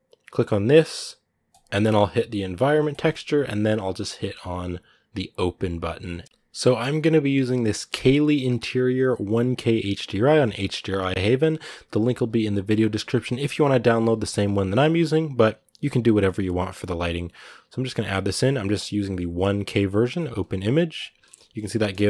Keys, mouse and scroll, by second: 20.1 click, 21.0 shift+middle click, 21.6 scroll down 1, 21.8-22.0 middle drag.